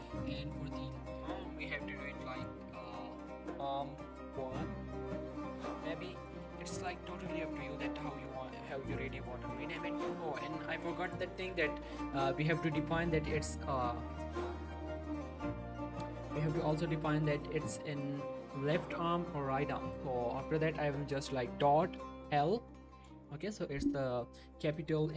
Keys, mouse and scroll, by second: 0.5 shift+middle click, 0.6 shift+scroll up 2, 1.1 click, 1.4 scroll up 1, 2.0 click, 3.0-4.3 typing, 6.4 click, 8.2-8.7 typing, 11.1 click, 11.3 g, 11.5 right click, 12.4 shift+middle click, 13.6 g, 13.7 right click, 14.9 click, 16.1 shift+middle click, 16.5 g, 16.8 right click, 17.4 click, 19.7 click, 21.6 click, 22.4 shift+l, 23.1 Return.